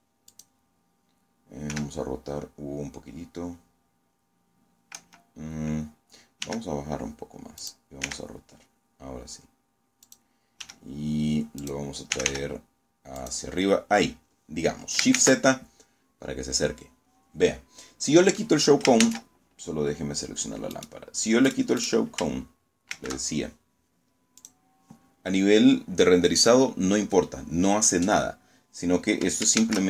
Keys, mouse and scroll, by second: 0.6 r, 3.8 Escape, 5.3 g, 6.5 click, 6.9 r, 8.9 click, 9.5 g, 10.5 click, 11.0 r, 12.0 click, 14.0 shift+z, 14.6-15.4 scroll up 2, 17.9 shift+z, 19.6 click, 20.4 right click, 20.8 right click, 21.8 shift+z, 23.3 click, 28.4 shift+z.